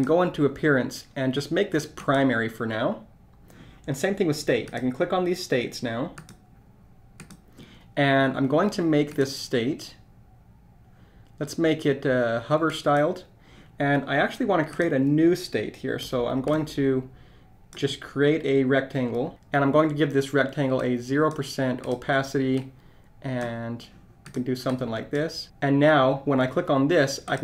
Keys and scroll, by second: 16.5 shift+r.